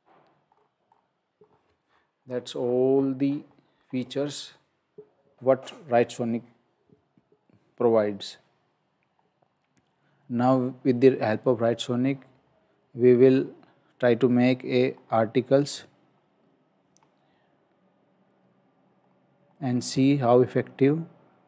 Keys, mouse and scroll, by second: 0.5-1.4 scroll down 1, 1.4 scroll up 1, 11.8-12.5 scroll down 1, 13.3-14.4 scroll up 1, 15.1 scroll down 1, 18.4-19.0 scroll up 1, 19.6 scroll down 1.